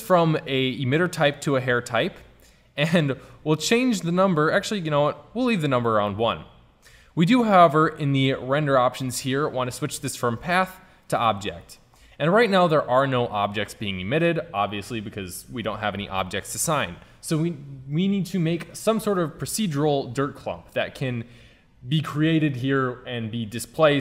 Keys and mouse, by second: 16.6 middle drag.